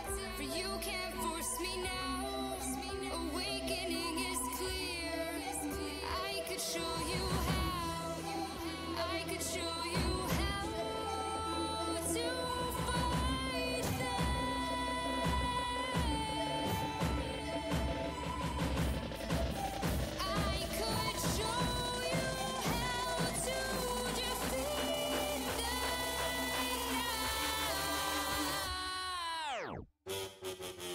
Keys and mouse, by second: 9.2 f, 10.5-12.6 drag, 16.1 f, 29.1 click, 29.6-30.9 middle drag, 30.8 click.